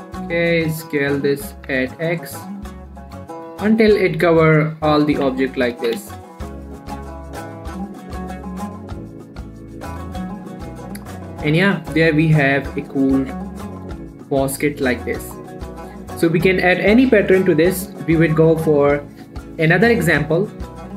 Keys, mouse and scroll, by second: 0.5 s, 0.7 x, 1.8 click, 2.0 Tab, 2.4 click, 2.6 middle click, 2.9-3.3 scroll up 1, 3.3 middle click, 4.1-4.4 scroll up 1, 4.4 click, 4.7 middle click, 5.2 click, 5.5 Tab, 6.2 s, 6.4 x, 7.2 click, 7.3 Tab, 7.5 scroll down 1, 7.7 middle click, 8.1 click, 8.3 middle click, 8.9 scroll down 1, 9.1 middle click, 9.1-10.6 middle drag, 11.0-11.5 scroll up 1, 11.5 middle click, 11.7 scroll up 1, 11.9 scroll down 1, 11.9 middle click, 12.2 shift+middle click, 12.4-13.2 scroll up 2, 12.6 middle click, 13.9 scroll up 1, 14.1 click, 14.3 middle click, 14.5-14.9 scroll up 1, 14.9-15.3 scroll down 1, 15.3 click, 15.5 middle click, 15.7 scroll up 1, 15.8 middle click, 16.7-18.6 scroll down 1, 18.8 middle click, 18.9-20.9 scroll up 1.